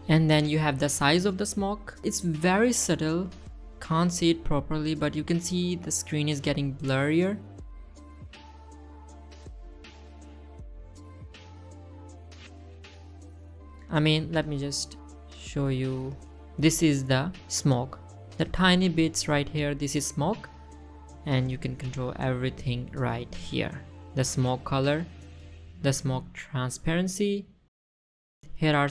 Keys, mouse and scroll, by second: 1.7-2.8 drag, 4.8-6.3 drag, 7.8 click, 10.0 click, 10.4 space, 11.6 space, 13.5-14.4 middle drag, 15.0 middle drag, 15.2 middle drag, 16.1 middle drag, 16.5 middle click, 17.2 scroll up 1, 17.4 middle drag, 17.8 scroll up 2, 18.0 middle drag, 18.9 shift+middle drag, 19.2 scroll up 1, 20.1 middle click, 22.0-22.6 scroll down 3, 23.3 click, 27.7 click.